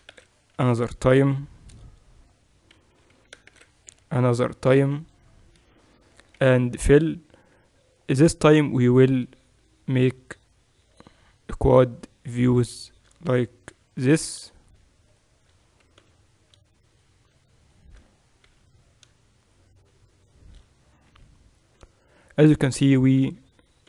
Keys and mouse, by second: 2.9 e, 6.4 f, 7.3 KP_7, 11.0 j, 13.7 j, 16.0 j, 18.4 j, 21.1 j.